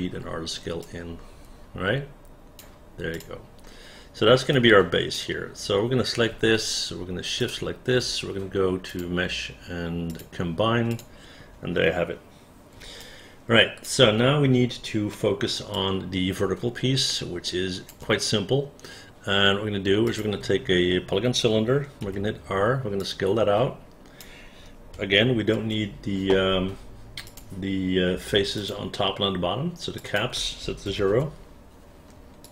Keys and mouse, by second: 1.0-2.7 drag, 3.2 click, 4.7 right click, 7.5 shift+click, 11.0 click, 13.2 alt+click, 15.2 alt+middle click, 15.8-18.0 alt+drag, 23.1-24.3 drag, 23.1 r, 25.7 ctrl+a, 30.1 click, 31.0 KP_0, 31.2 Return.